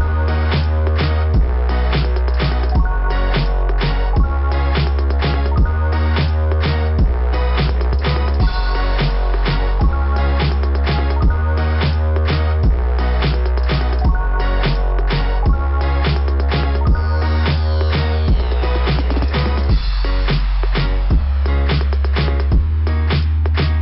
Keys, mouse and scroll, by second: 2.4 click, 2.6 click, 2.7 click, 2.9 click, 3.1 click, 3.2 click, 3.4 click, 3.6 click, 3.7 click, 3.9 click, 4.1 click, 4.2 click, 4.4 click, 4.5 click, 4.7 click, 4.9 click, 5.0 click, 5.2 click, 6.0 click, 6.3 click, 6.6 click, 7.9 click, 8.0 click, 11.8 click, 11.9 click, 12.0 click, 12.8 click, 12.9 click, 15.1 click, 15.2 click, 15.3 click, 15.5 double click, 19.0 click, 19.1 click, 20.1 right click, 20.2 right click, 22.6 click, 22.7 click.